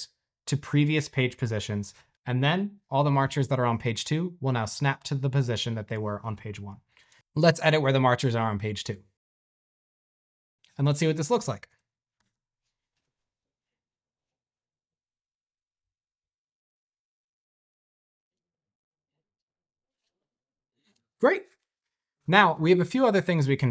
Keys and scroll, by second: 6.8-8.7 typing, 11.5-12.1 typing.